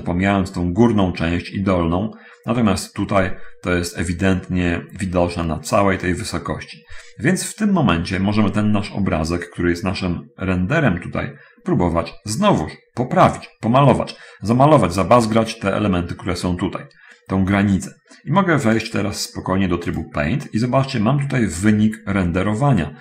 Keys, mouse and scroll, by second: 2.4-3.7 middle drag, 6.9-7.8 scroll down 1, 8.1-9.9 middle drag, 20.2 click.